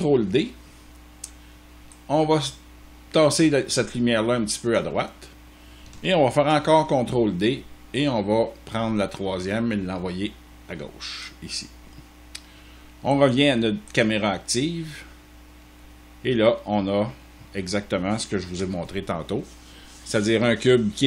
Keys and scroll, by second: 6.3 ctrl+d, 18.4 0.